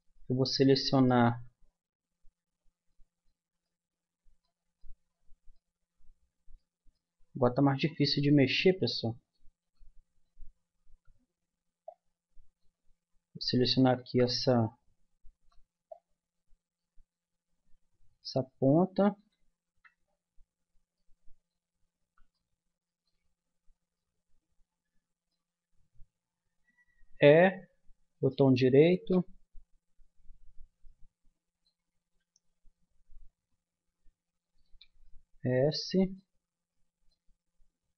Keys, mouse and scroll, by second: 0.2 Tab, 1.3 a, 2.7 middle click, 6.6-9.6 middle drag, 9.6 b, 14.0 z, 15.4 b, 18.4 click, 19.6 z, 27.1 e, 32.0 s, 35.2 middle click.